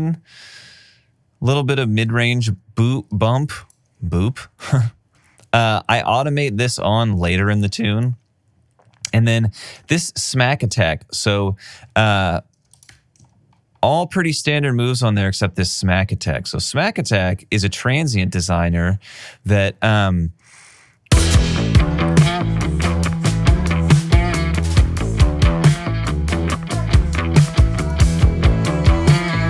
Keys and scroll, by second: 7.4 alt+super+w, 11.1 alt+super+w, 13.2 shift+t, 20.8 space.